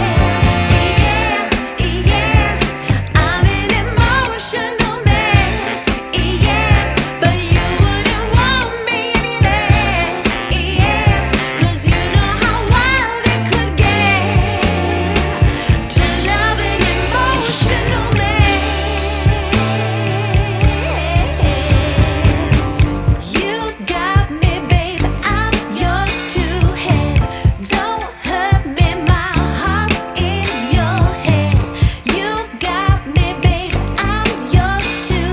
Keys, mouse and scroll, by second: 0.6 click, 4.3 scroll down 1, 4.4 scroll up 1, 4.6-5.7 scroll down 2, 5.7 scroll up 1, 5.8-7.2 scroll down 4, 7.2 scroll down 2, 7.3-7.7 scroll up 1, 9.4 click, 10.9 click, 13.2 click, 13.3 F10, 15.1 click, 16.3 scroll down 1, 16.3-17.0 scroll up 4, 17.0 scroll down 1, 17.2 scroll up 2, 17.4 scroll down 1, 17.5-18.3 scroll up 3, 19.3 click, 20.9-21.4 scroll up 4, 21.4 scroll down 1, 21.5-21.9 scroll up 2, 21.9 scroll down 1, 23.9 click, 26.6 click, 32.1 click.